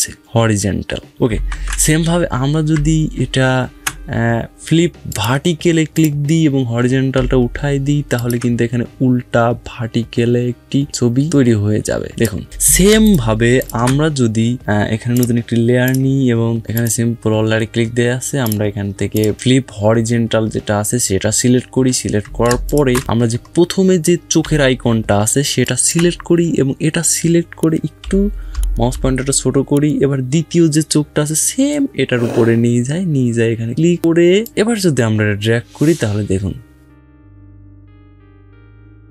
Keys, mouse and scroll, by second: 1.2 ctrl+z, 4.8 click, 7.9 alt+click, 10.8-12.4 drag, 12.4 ctrl+z, 12.6 ctrl+space, 12.8 ctrl+click, 13.2 ctrl+space, 13.6 ctrl+space, 14.9 click, 15.0 click, 18.3 typing, 22.0 ctrl+Num_Lock, 22.0 click, 22.2 ctrl+space, 22.4 ctrl+click, 23.0 scroll down 1, 25.4 alt+click, 27.8 [, 28.4 [, 28.8 [, 34.2-39.1 drag.